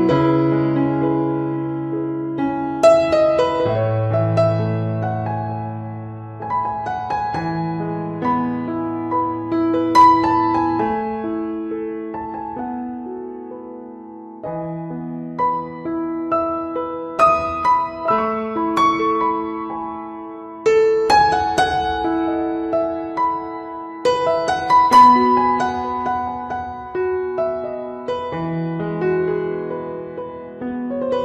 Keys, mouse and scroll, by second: 0.2 click, 0.3 click, 0.4 ctrl+right click, 0.6 shift+right click, 0.8 right click, 1.1 click, 1.3 f, 1.6 ctrl+right click, 1.9 ctrl+right click, 1.9 shift+right click, 2.1 shift+right click, 2.3 click, 2.4 click, 2.5 click, 2.7 click, 3.0 click, 3.1 middle click, 3.6 ctrl+right click, 3.7 right click, 3.9 click, 4.5 click, 4.7 ctrl+right click, 4.9 ctrl+right click, 5.0 right click, 5.2 click, 5.6 middle click, 5.9 ctrl+right click, 6.0 right click, 6.2 click, 6.7 middle click, 7.1 middle click, 7.6 middle click, 7.6 click, 8.1 right click, 8.3 f, 8.5 click, 9.1 click, 9.1 middle click, 9.6 click, 10.1 click, 10.3 middle click, 10.5 click, 10.7 click, 11.0 click, 11.3 ctrl+right click, 11.5 right click, 11.7 click, 11.9 middle click, 12.2 ctrl+right click, 12.6 click, 12.7 ctrl+right click, 12.9 right click, 13.1 click, 13.5 click, 14.0 click, 14.0 right click, 14.2 ctrl+right click, 14.2 right click, 14.4 ctrl+right click, 14.7 ctrl+right click, 14.9 middle click, 15.3 right click, 15.5 click, 16.1 ctrl+right click, 16.5 right click, 16.5 click, 17.1 middle click, 17.1 f, 17.4 right click, 17.5 click, 17.9 ctrl+right click, 18.1 click, 18.7 ctrl+right click, 19.1 middle click, 19.4 middle click, 19.7 right click, 19.8 right click, 20.1 ctrl+right click, 20.1 ctrl+right click, 20.4 shift+right click, 20.4 shift+right click, 20.8 click, 21.1 middle click, 21.5 ctrl+right click, 21.6 shift+right click, 21.8 right click, 21.9 right click, 22.2 shift+right click, 22.2 click, 24.1 middle click, 24.8 click, 25.2 click, 26.7 click, 27.2 middle click, 27.6 middle click, 27.9 shift+middle click, 28.1 shift+middle click, 28.1 middle click, 28.5 click, 29.2 click, 29.4 f, 30.7 click, 30.9 click.